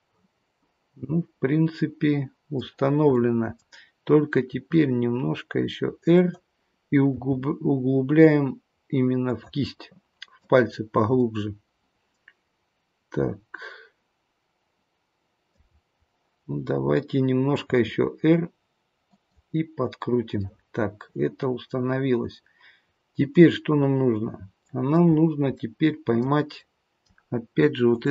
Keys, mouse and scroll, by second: 2.6-3.1 scroll down 1, 3.1 middle click, 4.5 r, 7.1 g, 9.6 middle click, 10.7-11.3 scroll up 2, 11.3 middle click, 11.3-12.0 scroll up 3, 15.9-17.6 scroll down 1, 17.6 r, 20.4 middle click, 25.1-25.8 scroll down 2, 25.6 middle click, 26.6 middle click, 27.9 click.